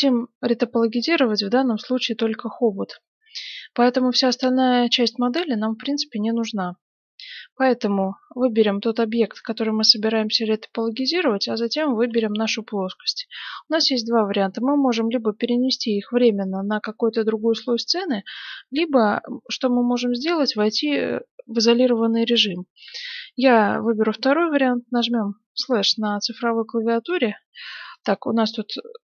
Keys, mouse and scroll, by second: 0.4-2.1 middle drag, 4.2-5.9 middle drag, 7.1-8.8 scroll down 1, 11.7 right click, 25.5 KP_Divide, 27.1-29.1 middle drag, 28.0-29.1 right drag.